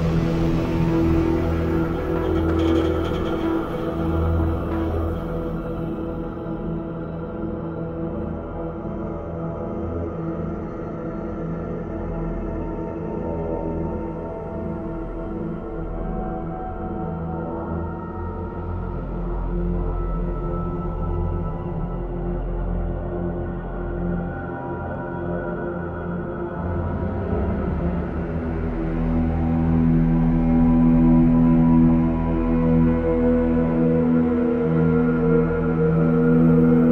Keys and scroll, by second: 1.8 v, 7.9 ctrl+d, 10.2 ctrl+d, 15.1 ctrl+d, 15.7 v, 22.3 ctrl+t, 24.1 ctrl+t, 25.4 ctrl+t, 25.5 ctrl+j, 27.0 ctrl+z, 28.1 ctrl+z, 28.2 ctrl+j, 29.5 ctrl+j, 29.5 ctrl+t.